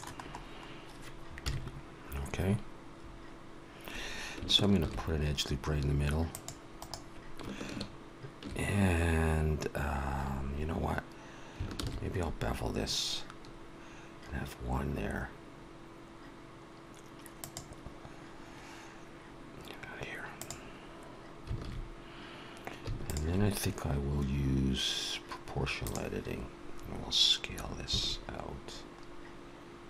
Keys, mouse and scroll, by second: 0.2 scroll up 1, 1.3 KP_1, 2.3-2.9 scroll up 2, 4.6 ctrl+r, 12.1 ctrl+b, 20.3 click, 21.6 alt+a, 23.0 alt+shift+click, 25.7 click, 27.9 s.